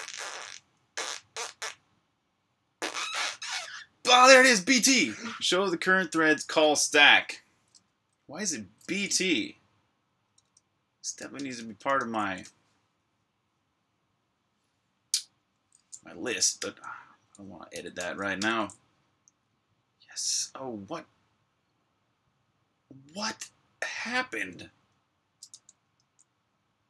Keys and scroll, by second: 0.0-1.3 typing, 9.1 super+Tab, 10.2 super+Tab, 11.2 shift+super+Tab, 16.5-18.3 typing, 24.7-25.7 typing.